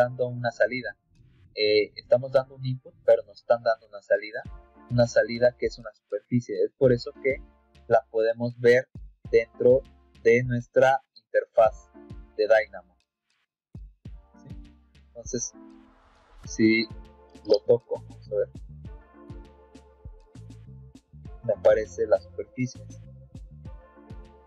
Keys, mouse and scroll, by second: 8.3 click, 17.4 Escape, 20.9-22.0 middle drag.